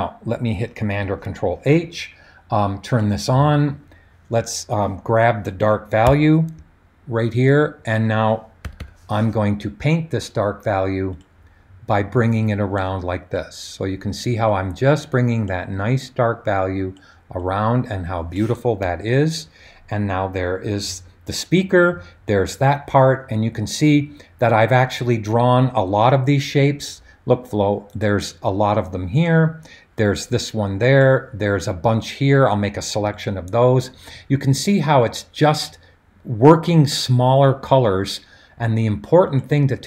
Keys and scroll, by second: 1.0 super+h, 6.0 b, 8.6 [, 8.8 [.